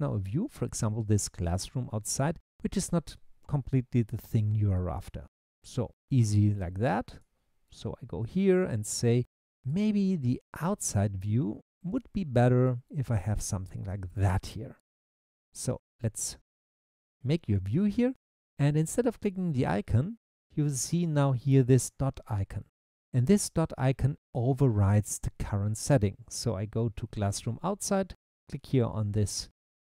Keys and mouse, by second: 1.4 click, 7.1 click, 7.7 middle drag, 13.0 middle click, 29.4 click.